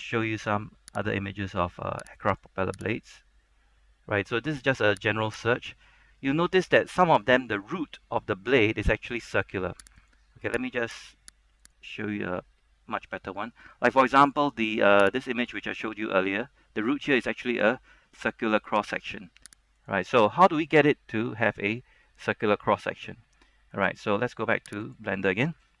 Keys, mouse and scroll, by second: 3.0 right click, 5.5 click, 8.4 scroll up 1, 10.1 click, 25.7-25.8 scroll up 1.